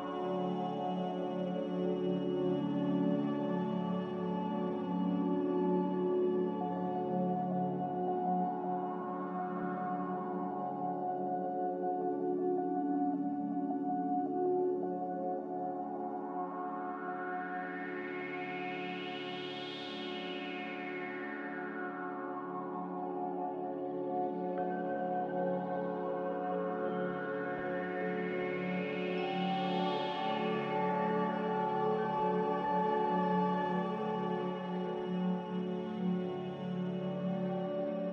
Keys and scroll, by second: 0.2 ctrl+c, 0.2 a, 7.9 n, 12.5 a, 22.7 g, 25.4 5, 30.4 a, 32.7 g, 34.7 typing, 35.0 Return, 38.0 z.